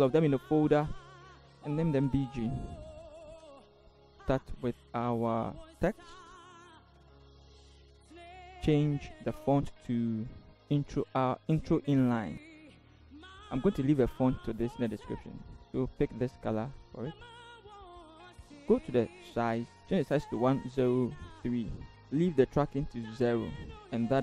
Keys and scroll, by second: 3.0 b, 3.1 g, 3.4 Return, 4.1 t, 7.1 ctrl+c, 20.4-21.4 typing, 21.7 Return.